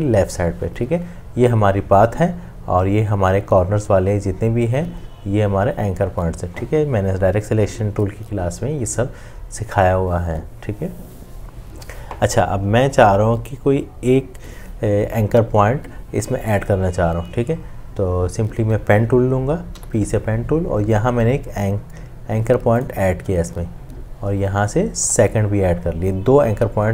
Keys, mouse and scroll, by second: 19.8 p.